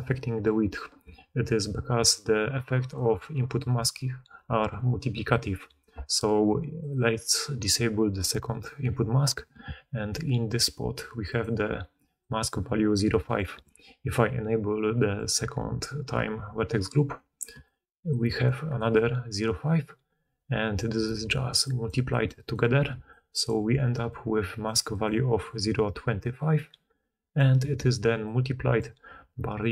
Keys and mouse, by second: 5.9-7.6 right drag, 6.6 click, 6.6 middle click, 7.6-10.8 drag, 9.5 d, 9.8 d, 9.9 d, 10.0-13.4 d, 10.0 middle click, 10.0 right click, 11.0-15.2 drag, 11.0-17.2 middle drag, 11.0-20.6 right drag, 17.4-20.6 middle drag, 17.4-28.8 typing, 17.5-20.6 drag.